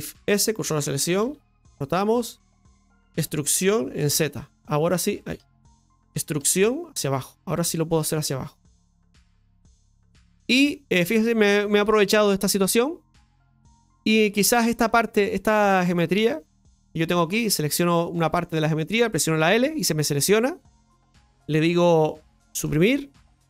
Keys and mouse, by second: 12.3 Tab, 13.5 Tab, 13.5 click, 15.1 right click, 17.9 Tab, 17.9-19.4 right drag, 22.5 l.